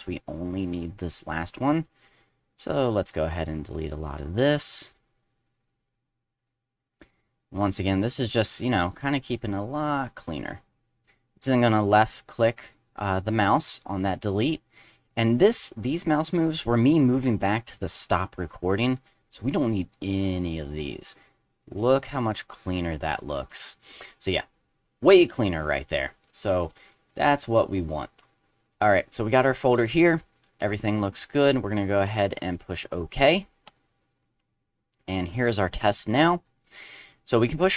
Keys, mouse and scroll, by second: 0.2 middle click, 1.0 click, 1.5 click, 3.0 click, 3.3 click, 3.5 click, 3.7 click, 4.0 click, 4.3 click, 4.8 middle click, 6.4 click, 7.1 click, 7.6 click, 8.0 click, 8.3 click, 8.6 click, 8.9 click, 9.4 click, 10.3 click, 15.0 click, 16.4 click, 19.3 click, 19.4 click, 19.6 click, 19.8 click, 20.0 click, 20.2 click, 20.4 click, 20.6 click, 21.1 click, 21.8 click, 26.7 click, 33.6 click, 35.3 click.